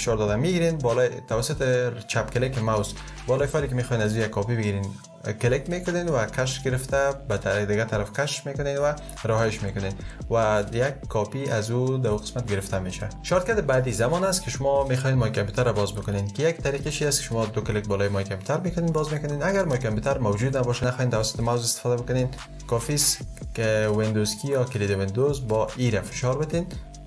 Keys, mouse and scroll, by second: 1.5 ctrl+click, 3.0 ctrl+click, 7.4 ctrl+click, 25.1 super+e.